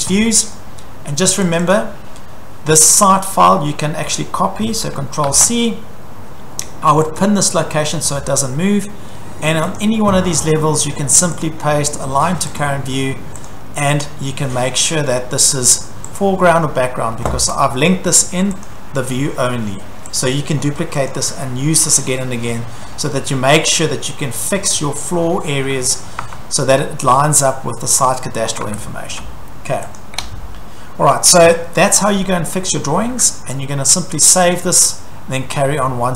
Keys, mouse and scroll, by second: 0.6 middle click, 1.6 click, 1.7 click, 1.8-3.1 scroll, 3.1 click, 3.1 middle click, 3.4 scroll, 4.0 scroll, 5.2 ctrl+c, 7.2 click, 9.6 click, 9.7 click, 11.5 click, 12.6 click, 13.5 click, 14.0 click, 15.0 click, 16.2 click, 17.4 Escape, 18.7 click, 19.1-19.5 scroll, 20.2 click, 20.6-21.1 scroll, 21.1 click, 22.4-23.0 scroll, 23.6 scroll, 25.6-26.5 scroll, 26.2 Escape, 27.1-27.9 scroll, 28.1 click, 28.5-29.1 scroll, 28.7 Escape, 30.0 click, 30.2 Delete, 34.5 click.